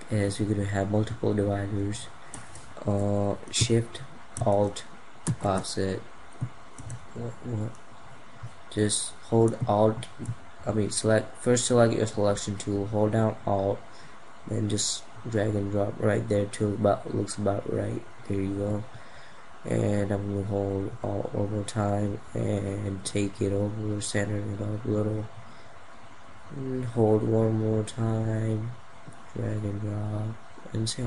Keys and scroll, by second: 4.8 alt+shift+-.